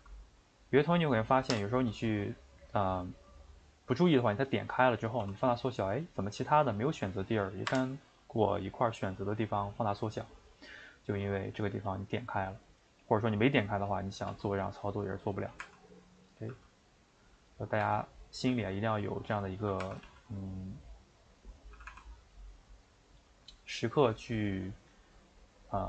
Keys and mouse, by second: 1.5 o, 5.2 s, 12.6 click, 14.3 s, 15.6 r, 16.5 g, 17.8 r, 19.8 r.